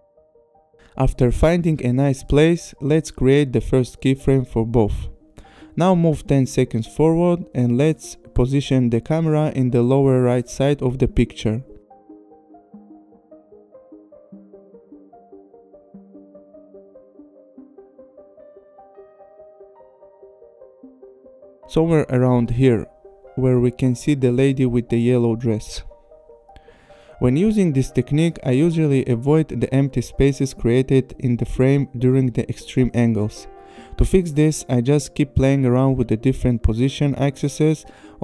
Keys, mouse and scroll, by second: 1.8 click, 2.4 click, 7.1 click, 7.6 click, 11.0 click, 12.6 click, 14.2 click, 16.2 click, 18.1 click, 20.6 click, 23.9 click, 27.7 click, 32.4 click, 34.1 click, 36.3 click, 36.5 click.